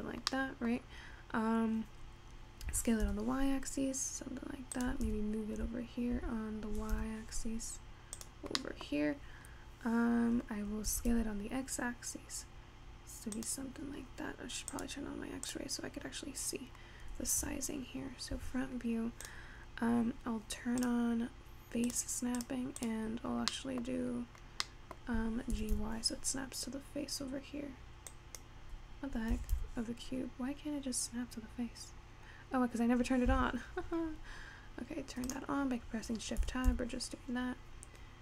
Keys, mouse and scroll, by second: 0.5-2.7 middle drag, 2.7 s, 5.1 g, 8.6 scroll down 1, 8.7 middle click, 9.1-9.6 scroll up 3, 9.6-10.4 scroll down 1, 10.4-11.2 scroll down 1, 11.2 s, 13.9-14.8 scroll up 2, 14.8 click, 15.5 click, 16.4-17.2 scroll down 1, 17.2 scroll down 1, 17.5 `, 20.1 click, 21.3-22.5 drag, 23.1 click, 24.0-25.7 middle drag, 25.7 g, 29.3 g, 35.8 click, 36.5 g.